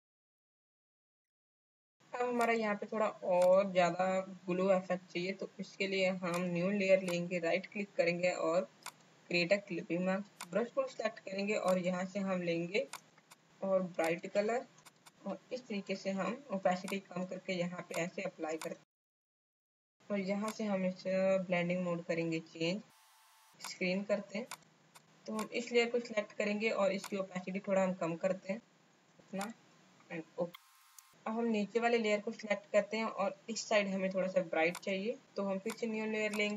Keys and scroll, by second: 0.8 space, 1.6 space, 14.8 space.